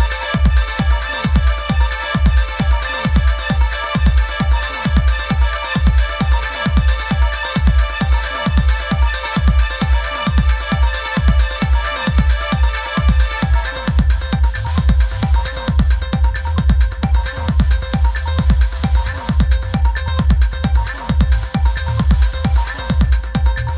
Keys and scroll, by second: 10.6 Right, 11.2 Left, 13.2 Right, 13.6 Down, 14.3 super+-, 18.5 super+=.